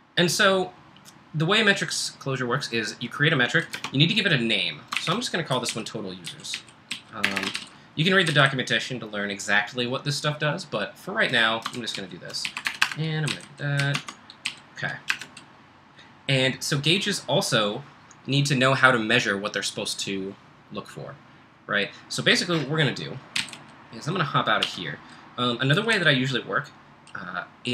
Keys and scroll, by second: 3.7 space, 4.9-9.2 typing, 11.3-15.6 typing, 23.1-23.9 typing, 24.7 F2, 25.7-26.4 typing.